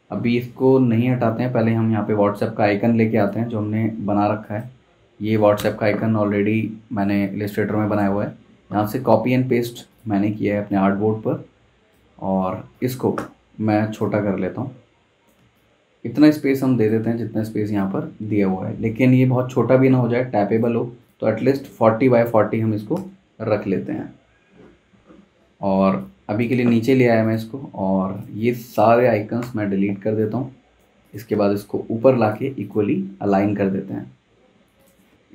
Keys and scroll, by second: 5.2 super+c, 5.6 super+Tab, 8.8 super+v, 12.1 z, 13.2 v, 22.6-23.4 typing, 29.4 BackSpace.